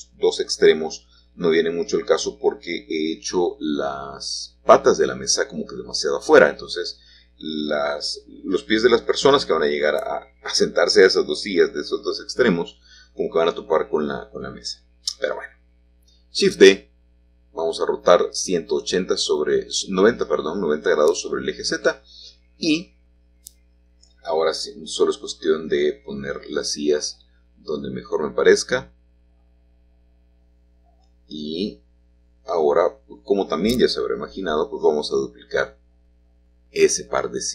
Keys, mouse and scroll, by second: 0.6 Escape, 4.0-5.1 drag, 5.5 r, 7.3 Return, 7.3 typing, 13.2 shift+middle click, 13.2 shift+click, 13.6 shift+middle click, 13.7-14.7 shift+drag, 15.9 Escape, 17.5 r, 18.8 z, 20.0 Return, 20.0 typing, 24.0 7, 27.0 click, 27.9-29.8 shift+drag, 30.0 g, 30.7 shift+z, 34.1 click, 35.4 shift+click, 35.9-37.5 shift+drag.